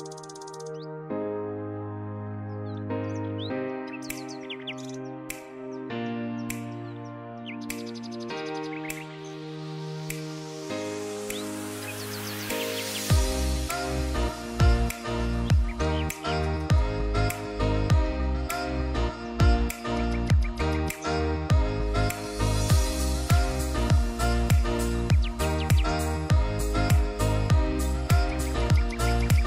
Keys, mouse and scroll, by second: 2.0 x, 2.5-4.0 drag, 9.5 right click, 10.4-15.5 drag, 18.8 alt+Num_Lock, 18.8-21.1 drag, 21.1 ctrl+d, 22.5-29.4 drag.